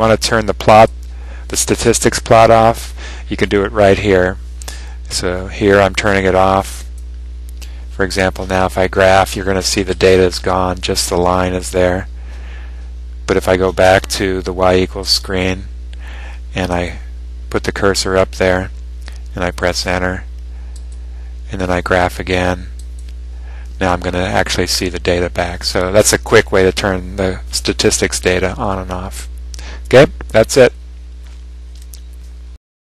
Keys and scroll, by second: 0.9 Up, 6.9 Return, 16.9 Up, 20.9 Return.